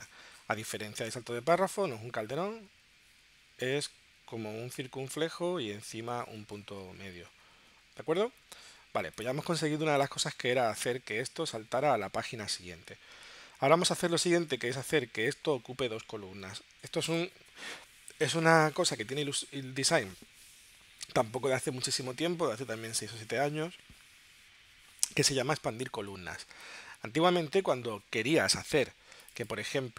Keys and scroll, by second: 9.4 space.